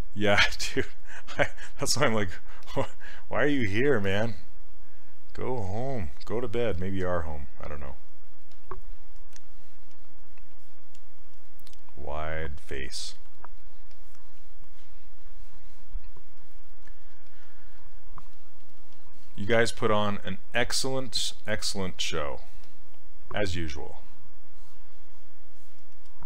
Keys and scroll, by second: 17.2 s.